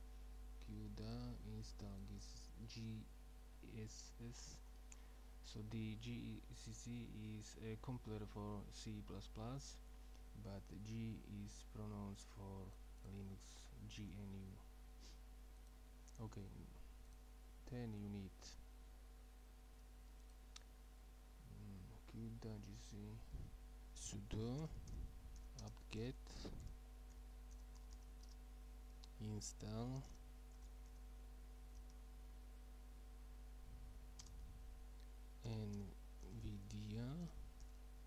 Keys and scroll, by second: 24.1-28.5 typing, 30.0-31.9 typing, 35.2-37.6 typing.